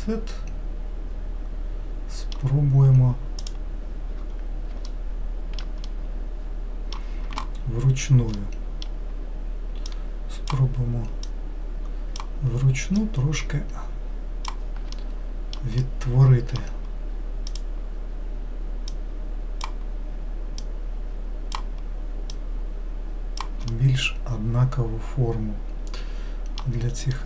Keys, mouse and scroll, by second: 3.4 click, 4.9 alt+middle click, 5.8-9.9 middle drag, 9.9 click, 11.2 click, 13.0 click, 15.0 alt+middle click, 15.8-17.5 middle drag, 17.5 click, 18.9 click, 20.6 click, 22.3 click, 23.7-26.7 middle drag, 27.1-27.2 middle drag.